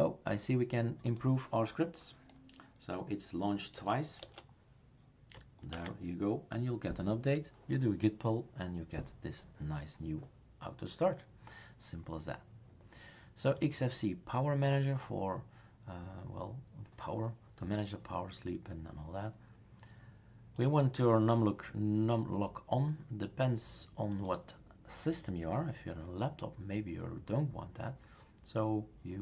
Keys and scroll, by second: 3.8 BackSpace, 4.2 BackSpace, 5.7 ctrl+s.